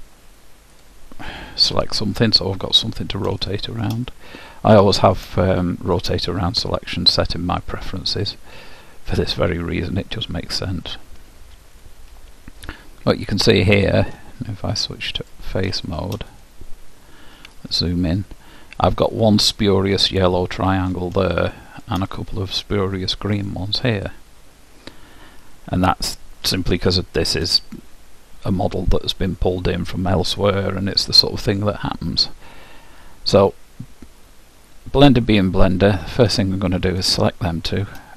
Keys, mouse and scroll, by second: 0.9-2.6 drag, 1.8 KP_Decimal, 2.6-5.2 middle drag, 6.6-8.6 drag, 7.8-9.0 middle drag, 9.2 middle click, 15.4-17.6 drag, 16.0-17.9 middle drag, 17.4 KP_Decimal, 17.9 click, 18.0-19.1 middle drag, 19.1-20.8 drag, 21.4-22.8 middle drag, 22.8-25.3 drag, 23.0 middle click, 24.9-29.7 middle drag, 35.9-38.1 drag.